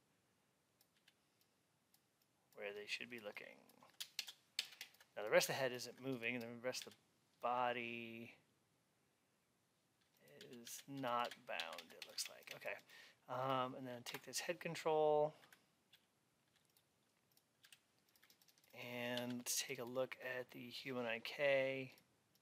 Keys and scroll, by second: 6.7 alt+x, 14.0 Up, 19.0 alt+x.